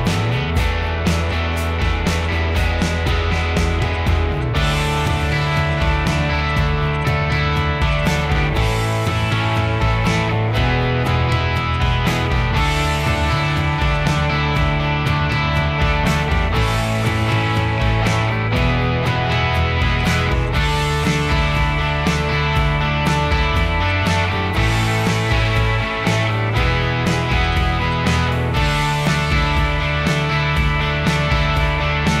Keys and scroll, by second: 6.3 p, 7.7 space, 8.4 ctrl+g, 9.5 ctrl+g, 10.7 m, 12.7 space, 15.5 ctrl+g, 15.5 h, 23.1 i, 24.0 Escape, 24.3 Escape, 26.7 Escape, 28.7 Escape, 28.8 Escape.